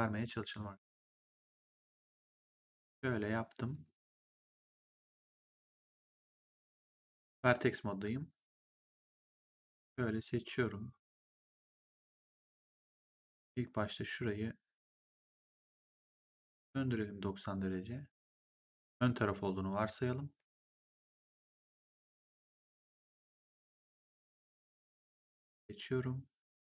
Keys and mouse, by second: 0.8 click, 2.3 click, 6.3 right click, 8.8 click, 13.9 click, 16.0 e, 16.8 click, 18.8 w, 19.7 click, 20.9 click, 24.0 click.